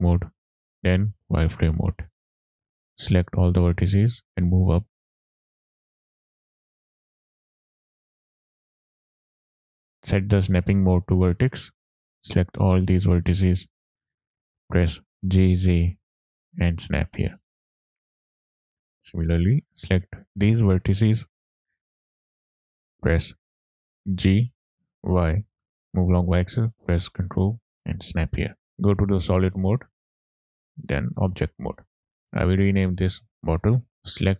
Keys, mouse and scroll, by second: 0.8 z, 1.8 click, 2.6 scroll up 2, 3.4 click, 5.0 scroll down 2, 5.2 shift+middle click, 5.3 click, 5.6 click, 5.9 click, 6.1 click, 6.6 click, 6.9 click, 7.6 scroll down 1, 7.6 middle click, 7.8 click, 8.1 click, 8.6 click, 8.8 click, 9.2 shift+middle click, 9.2-10.1 scroll up 2, 10.7-11.5 drag, 12.1 click, 13.3 scroll up 2, 15.2 g, 15.7 z, 17.2 ctrl+click, 17.9-18.5 scroll down 4, 18.5 shift+middle click, 19.3 click, 20.7 scroll up 2, 21.1 shift+middle click, 21.9-22.3 scroll up 2, 24.2 g, 25.4 y, 27.7 ctrl+click, 28.0-28.5 scroll down 2, 28.5 shift+middle click, 28.6 z, 29.5 shift+middle click, 29.9-30.3 scroll down 2, 30.3 Tab, 30.8-31.6 middle drag, 32.1 click, 32.3 click, 33.9 t.